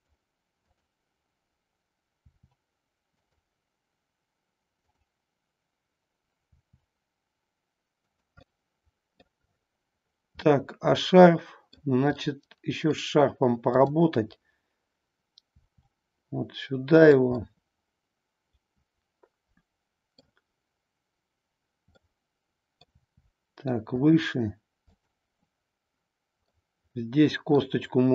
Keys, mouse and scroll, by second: 0.6 click, 2.2 r, 3.2 click, 6.6 r, 8.1 click, 8.3-9.2 middle drag, 10.4-12.0 middle drag, 12.2-13.0 middle drag, 15.6 r, 17.0 click, 17.5-20.2 middle drag, 21.9 middle click, 23.1 r, 24.0 drag, 24.8-26.0 drag, 26.5-27.6 middle drag.